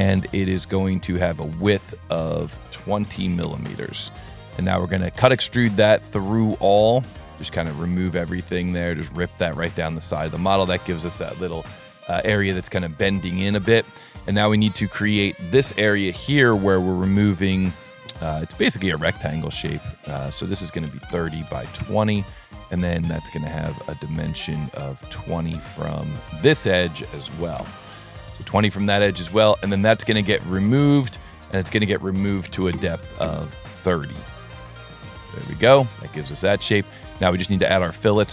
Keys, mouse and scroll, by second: 1.9 click, 2.4 click, 4.2 s, 5.7 click, 7.2 click, 8.7 click, 9.6 click, 10.1 click, 10.5-13.6 middle drag, 13.9 scroll up 2, 14.2 click, 14.6 s, 15.4 click, 16.4 s, 17.2 click, 18.5 click, 20.0 click, 22.2 s, 24.2 click, 25.9 click, 26.7 click, 28.8 s, 29.9 click, 31.6 click, 34.0-35.0 middle drag, 35.3 scroll up 1, 35.5 scroll down 2, 35.9 middle click, 37.0 middle click, 37.4 s.